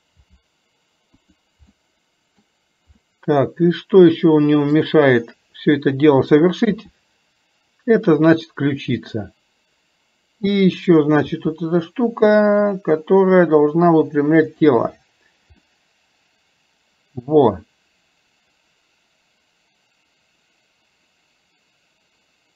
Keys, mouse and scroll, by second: 1.8 middle click, 3.0 scroll up 1, 3.1-4.8 middle drag, 5.9 click, 10.7 click, 15.8-20.8 middle drag, 20.9 middle click, 21.6-22.5 middle drag.